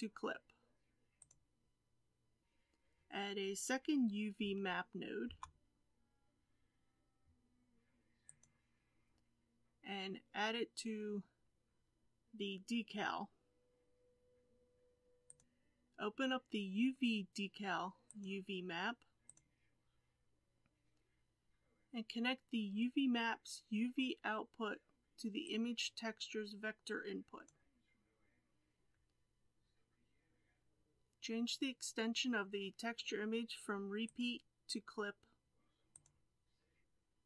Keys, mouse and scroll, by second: 25.4-27.4 drag, 36.0 click.